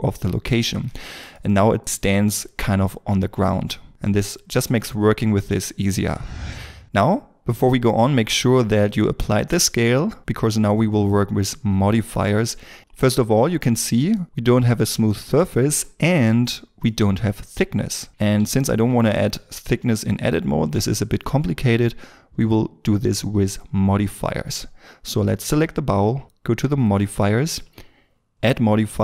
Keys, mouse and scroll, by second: 0.6 scroll down 1, 1.0 shift+middle click, 1.3 shift+middle click, 6.9-9.4 scroll up 1, 12.6 n, 13.7 scroll, 13.8 scroll up 1, 14.2 middle click, 16.0-16.8 scroll, 16.8 middle click, 18.1 scroll down 1, 18.4 shift+middle click.